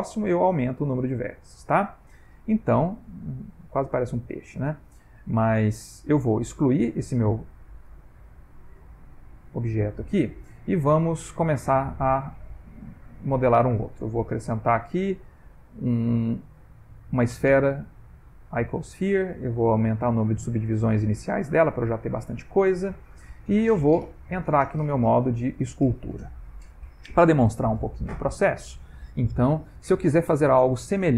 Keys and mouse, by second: 0.0 ctrl+middle click, 0.6 click, 1.2 ctrl+middle click, 1.7 ctrl+middle click, 2.2 middle click, 4.6 Tab, 4.9 ctrl+middle click, 5.4 middle click, 5.8 Tab, 6.4 x, 7.5 Tab, 9.6 click, 10.7 ctrl+middle click, 11.4 x, 12.3 middle click, 12.4 middle click, 13.2 ctrl+middle click, 13.4 ctrl+middle click, 14.3 shift+a, 19.5 click, 21.3 ctrl+middle click, 24.1 click.